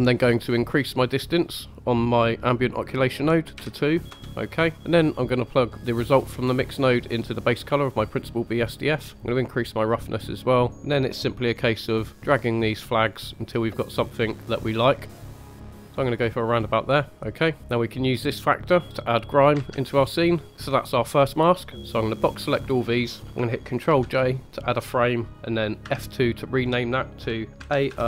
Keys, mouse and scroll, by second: 0.9-4.1 drag, 4.7 click, 5.8-7.4 drag, 9.1 click, 11.4-11.7 scroll up 1, 12.1-13.8 drag, 14.4-15.8 drag, 16.0 scroll down 2, 16.4-16.8 scroll up 2, 16.8-17.6 middle drag, 18.8 scroll up 1, 20.3 click, 20.4 middle click, 20.4 scroll down 1, 21.1-21.8 middle drag, 21.8 click, 23.8 ctrl+j, 25.8 F2.